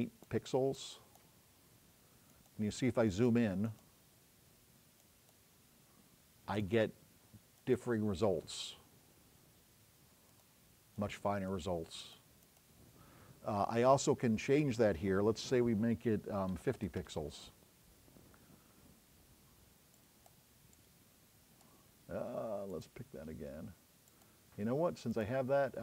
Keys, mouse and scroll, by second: 1.6-2.1 scroll up 4, 4.3 scroll down 2, 9.1-9.6 scroll up 4.